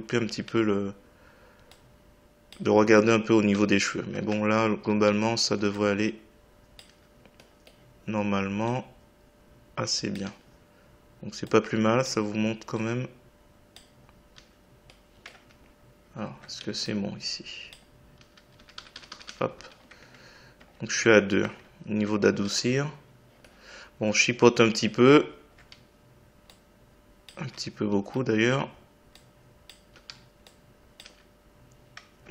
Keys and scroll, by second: 2.6 Delete, 6.8 Delete, 10.2 Delete, 14.3 Delete, 18.2 Delete, 27.4 Delete, 29.9 Delete.